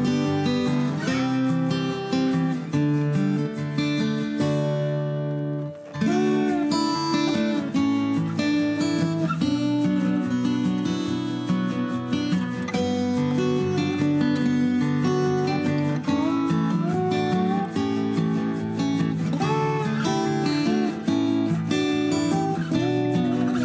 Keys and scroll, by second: 4.0 Escape.